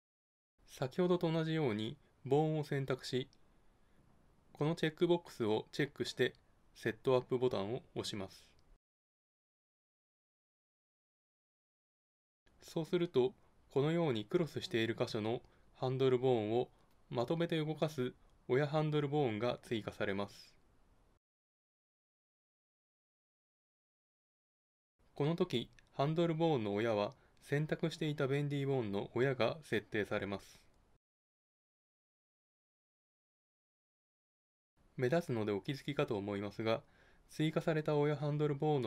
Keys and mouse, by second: 4.0-5.8 drag, 8.5-10.3 drag, 25.0 click, 25.1 [, 28.4 [.